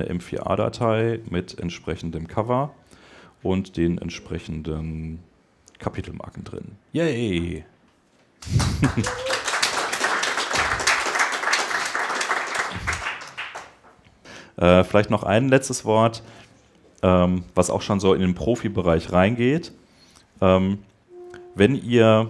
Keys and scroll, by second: 16.3 shift+super+Tab, 17.8 super+Tab.